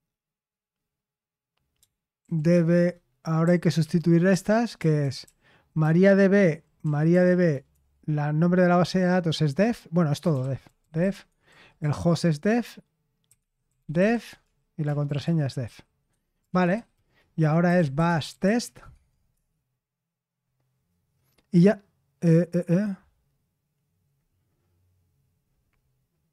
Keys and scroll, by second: 1.9-5.4 typing, 6.5-7.3 typing, 9.9-11.9 typing, 13.0-21.5 typing.